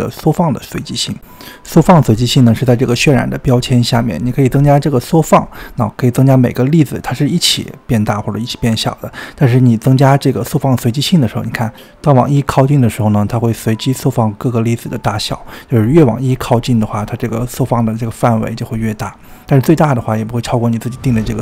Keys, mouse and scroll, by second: 5.8-7.7 scroll up 2, 7.7-13.1 drag, 13.5-19.1 drag, 20.1 click.